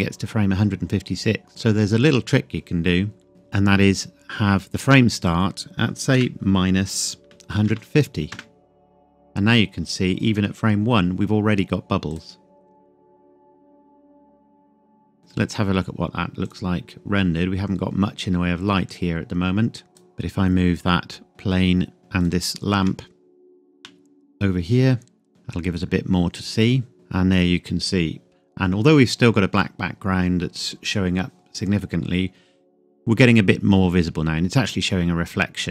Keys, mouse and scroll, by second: 1.4-2.4 scroll up 1, 3.3 click, 5.2 click, 6.2 KP_Subtract, 7.2 KP_1, 7.5 KP_5, 7.6 KP_0, 8.3 KP_Enter, 12.1 click, 19.9 click, 20.3-20.6 scroll down 1, 21.3 click, 21.4-21.9 scroll down 1, 21.9 scroll up 1, 22.0 scroll down 1, 22.2 shift+click, 23.8 g, 25.3 click, 25.5-25.8 scroll up 1, 31.8 scroll up 1, 35.4 scroll down 1.